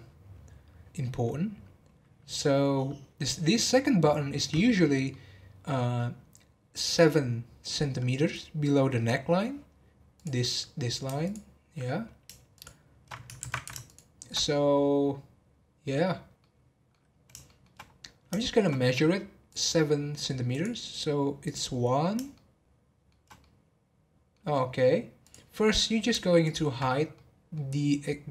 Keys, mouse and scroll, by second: 2.4-8.2 middle drag, 10.1-11.3 drag, 12.5 alt+shift+click, 13.8 alt+shift+click, 16.4-17.8 middle drag, 17.8 scroll up 2, 18.4-19.5 shift+middle drag, 19.5 click, 20.0 scroll up 1, 20.5 click, 21.4 click, 22.3-25.2 shift+middle drag, 25.2 click, 25.5-26.4 scroll down 1, 26.4 alt+click, 27.1-28.3 middle drag.